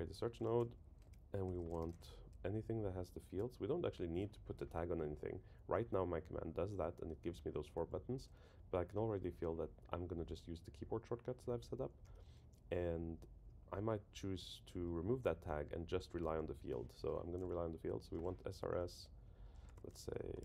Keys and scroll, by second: 3.4 Return, 3.9 Down, 18.8 Up, 19.2 Right.